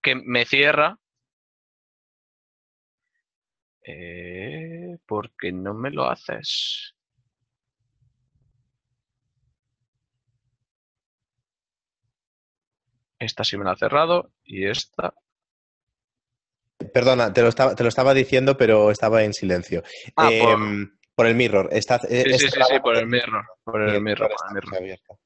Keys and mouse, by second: 0.6 click, 1.3 shift+middle click, 2.9 ctrl+middle click, 4.0 click, 5.7 shift+middle click, 7.2 click, 9.2 z, 10.5 shift+a, 12.3 click, 13.8 right click, 14.7 Tab, 15.8 click, 18.0 shift+middle click, 18.4 right click, 19.6 click, 21.7 ctrl+middle click, 22.8 shift+middle click.